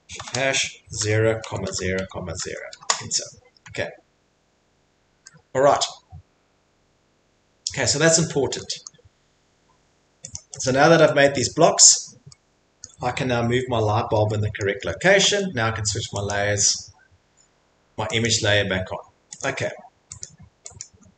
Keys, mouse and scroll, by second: 0.2-3.8 typing, 3.7 scroll, 3.8 middle click, 5.7 middle click, 8.9 middle click, 10.3 right click, 10.3 scroll, 10.6 right click, 12.8 click, 12.8-13.8 scroll, 13.8 middle click, 14.2 middle click, 14.6 scroll, 15.2 Escape, 16.2 click, 18.2 click, 19.4 click, 20.2 click, 20.8 click, 21.0 middle click, 21.1 middle click.